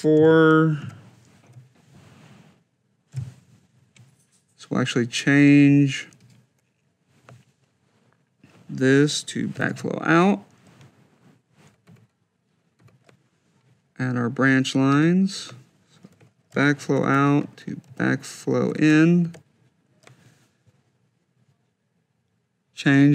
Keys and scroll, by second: 0.7 4, 1.0 Down, 1.3 -, 3.5 4, 9.1-10.0 typing, 11.7 F2, 16.3 shift+b, 16.8 shift+c, 17.1 Tab, 17.7 shift+b, 18.5 shift+i, 19.0 Tab.